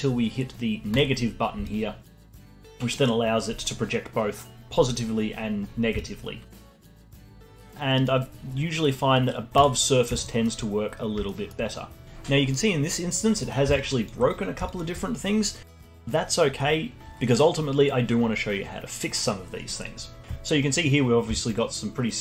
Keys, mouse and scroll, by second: 0.9 click, 1.6-4.7 alt+drag, 5.0 scroll up 1, 5.7 scroll up 1, 5.9-6.6 alt+drag, 6.6 scroll down 1, 6.9 alt+click, 7.2-7.5 scroll down 1, 7.5-10.2 alt+drag, 10.2-12.0 alt+middle drag, 13.3 middle click, 13.7-16.9 alt+drag, 16.9 scroll up 1, 20.5 middle click, 21.0 scroll up 2, 21.3-22.2 alt+drag.